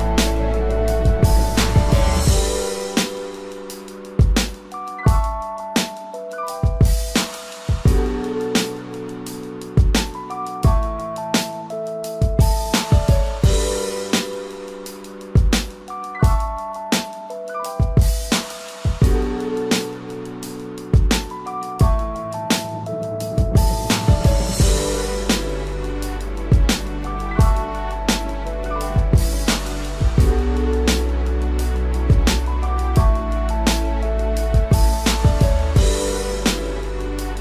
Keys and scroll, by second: 0.4 ctrl+t, 5.7 ctrl+t, 9.4 ctrl+t, 11.6 ctrl+t, 13.9 ctrl+j, 16.0 ctrl+j, 16.5 ctrl+t, 18.5 ctrl+j, 18.6 ctrl+y, 19.1 ctrl+t, 21.0 ctrl+j, 23.4 ctrl+j, 24.4 ctrl+y, 24.9 ctrl+t, 27.6 ctrl+t, 28.4 ctrl+j, 28.7 ctrl+-, 31.6 ctrl+j, 32.0 ctrl+t, 33.9 ctrl+j, 36.6 ctrl+j, 37.3 ctrl+t.